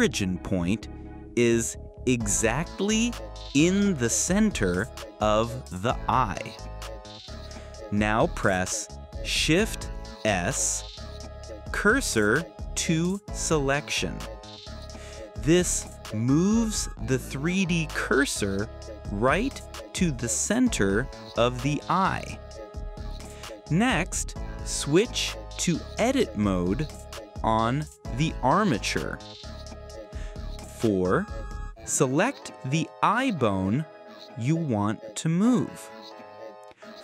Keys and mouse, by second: 9.7 shift+s, 14.1 click, 14.7 click, 16.1 click, 17.2 click, 19.2 click, 20.3 click, 22.3 click, 23.1 click, 25.7 click, 28.1 shift+s, 32.9 click, 33.4 click, 34.8 click, 36.2 shift+s.